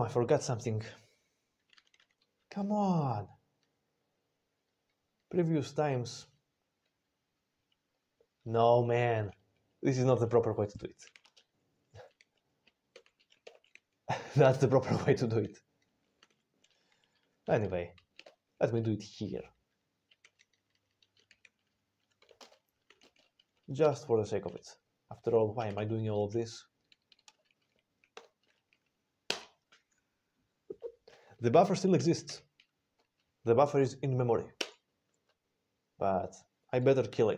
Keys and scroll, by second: 1.7 ctrl+x, 1.8 1, 3.5 ctrl+p, 4.1 ctrl+p, 4.2-4.9 ctrl+p, 5.0-6.1 ctrl+p, 6.8 ctrl+n, 6.9 ctrl+n, 7.2 ctrl+n, 7.4 ctrl+n, 8.3-11.1 ctrl+n, 11.1 ctrl+a, 11.1 ctrl+space, 11.3 ctrl+n.